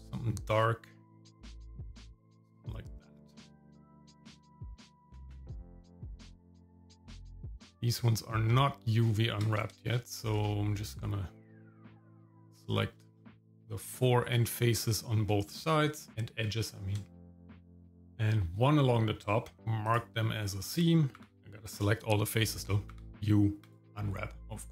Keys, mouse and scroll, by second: 2.5 click, 4.9 middle click, 5.2 scroll up 2, 6.5 scroll down 2, 7.6 click, 8.5 Tab, 9.8 shift+middle click, 11.4 click, 11.9-12.9 shift+middle drag, 13.1-13.5 scroll down 2, 13.5 middle click, 13.9 shift+middle click, 14.5 middle click, 14.8 scroll up 2, 15.6 shift+click, 17.2 shift+click, 17.5 shift+middle click, 19.6 right click, 19.6 u, 21.2 u, 21.4 Tab, 21.4 scroll down 1, 21.4 a, 22.9 u.